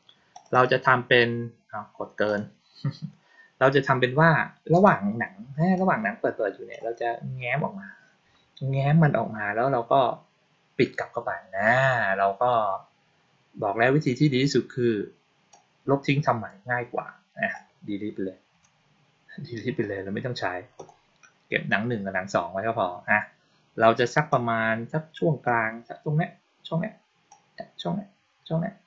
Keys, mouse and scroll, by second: 0.2 click, 0.4 click, 2.1 click, 5.6-6.6 drag, 15.4-16.3 drag, 20.6 click, 24.2-25.3 drag, 27.1-28.8 drag.